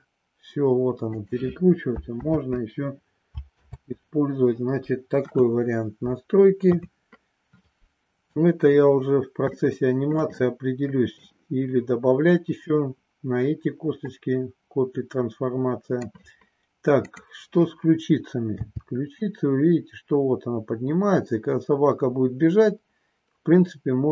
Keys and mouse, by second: 1.2 click, 2.2 ctrl+z, 5.2 KP_1, 6.6 KP_3, 9.5 shift+middle click, 10.5 middle click, 14.1-16.1 middle drag, 18.6 g.